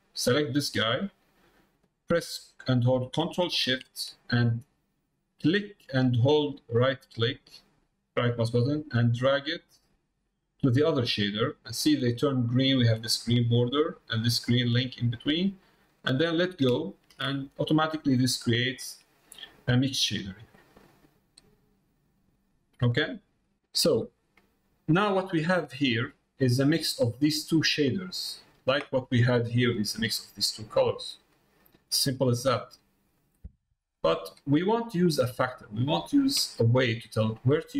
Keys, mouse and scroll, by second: 20.7 click, 21.8-23.5 middle drag, 24.9 middle click, 28.2 middle click, 28.9 middle click, 30.8 middle click, 31.4 middle click, 32.3 middle click, 32.6 middle click, 33.4 middle click, 33.9 click, 34.9 middle click, 37.4 middle click.